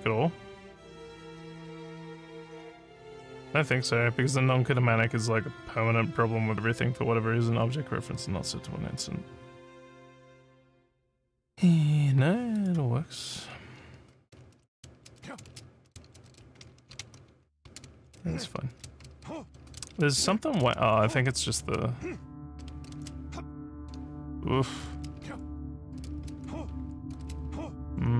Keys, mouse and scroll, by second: 1.1 click, 12.6 click, 14.2-23.8 typing, 24.9-28.1 typing.